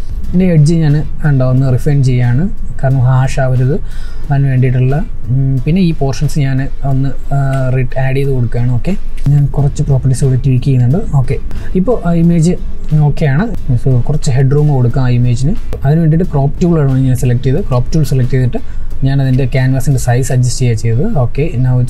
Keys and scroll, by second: 21.4 ctrl+t.